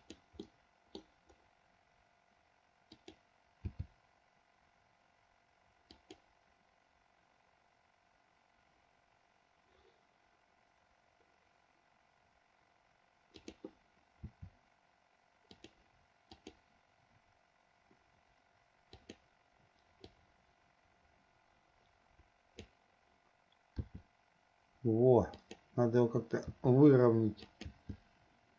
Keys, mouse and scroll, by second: 0.6 middle click, 3.0 click, 3.9 g, 13.4 click, 14.5 r, 16.5 click, 19.1 click, 20.3-22.9 drag, 23.9 r, 26.7 r, 27.9 g.